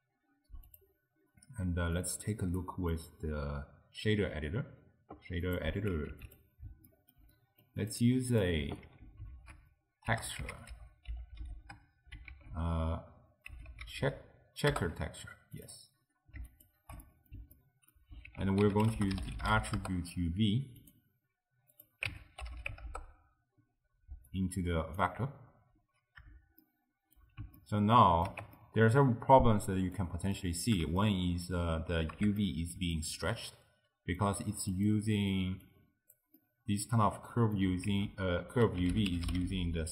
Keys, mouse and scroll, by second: 0.7 click, 2.0-6.0 drag, 6.2 q, 6.9 ctrl+middle click, 7.9 drag, 8.4 click, 9.2 ctrl+x, 9.4 ctrl+a, 16.7 ctrl+shift+click, 17.1-18.3 middle drag, 18.3 ctrl+a, 19.0 t, 21.8-24.4 drag, 26.7-35.7 shift+middle drag, 35.7 click, 36.4-37.9 middle drag, 37.9 ctrl+a.